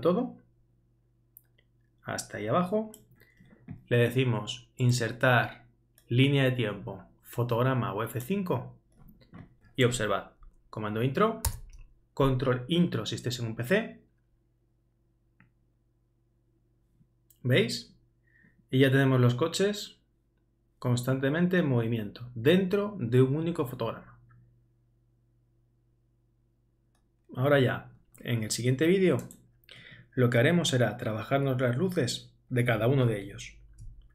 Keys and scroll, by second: 11.5 super+Return.